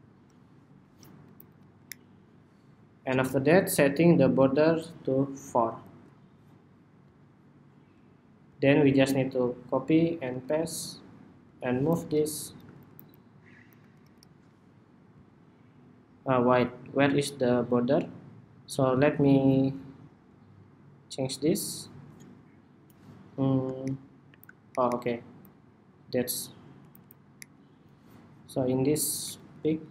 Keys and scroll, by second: 9.4 super+c, 10.0 super+v, 11.3 super+v.